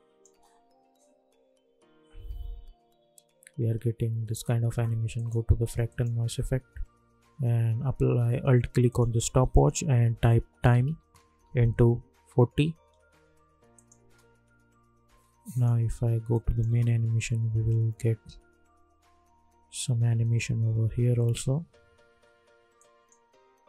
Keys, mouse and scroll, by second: 0.3 space, 4.2 space, 5.1 click, 9.9-12.7 typing, 13.7 click, 14.0 space, 15.5 click, 16.6 space, 22.0 space, 22.7 click.